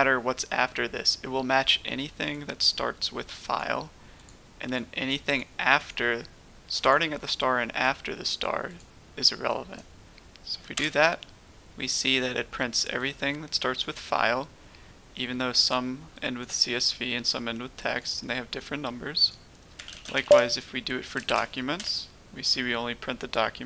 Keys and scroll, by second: 10.7 Return, 19.7-20.1 typing, 21.2-21.7 typing.